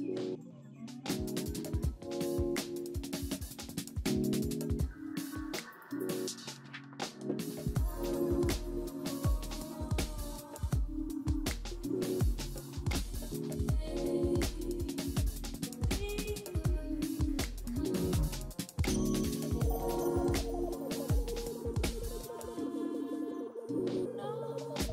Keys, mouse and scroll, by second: 0.1 scroll up 1, 0.3 alt+middle click, 1.1-2.9 alt+scroll down 1, 4.7 t, 5.3 z, 9.5 right click, 10.2 right click, 10.2 w, 12.5 middle click, 12.7 e, 14.1-14.9 typing, 17.5 double click.